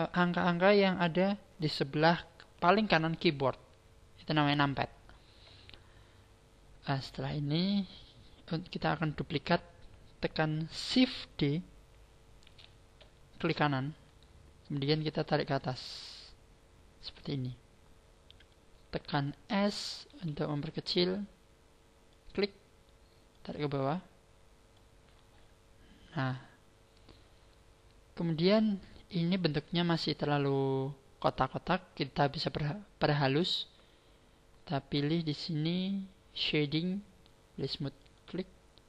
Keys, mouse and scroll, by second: 5.3 scroll down 5, 6.1-6.5 scroll up 5, 12.4 shift+d, 14.1 right click, 15.5 click, 20.1 s, 22.2 click, 23.3 click, 29.1-32.4 scroll up 1, 32.4 scroll up 1, 38.0 click.